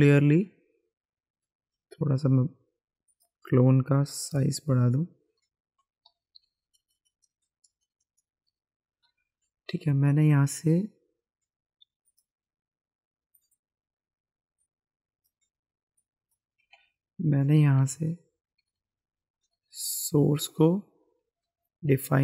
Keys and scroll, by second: 1.7 b, 1.9 b, 2.1 b, 2.3 b, 4.1 ], 6.0-8.2 typing, 16.6 ctrl+z, 17.8 ], 18.9-19.7 typing, 21.0 [.